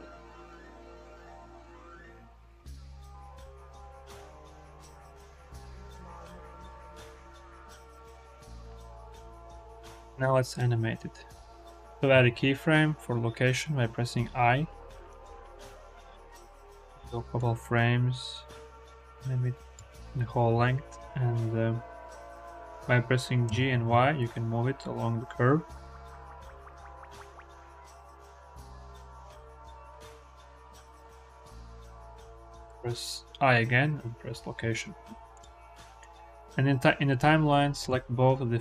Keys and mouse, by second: 5.3 g, 5.6 y, 12.0 i, 17.2-19.6 drag, 23.3 g, 23.7 y, 32.5 i, 35.2 click, 35.8 click, 36.1-38.6 drag.